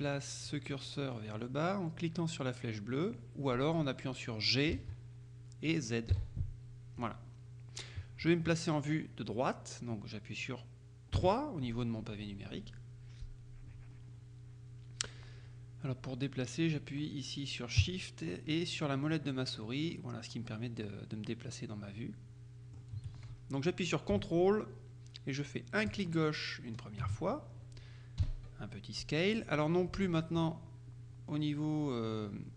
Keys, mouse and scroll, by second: 4.8 g, 6.2 z, 7.1 click, 11.3 KP_3, 19.2-23.3 shift+middle drag, 26.0 ctrl+click, 28.3 s, 30.1 Escape.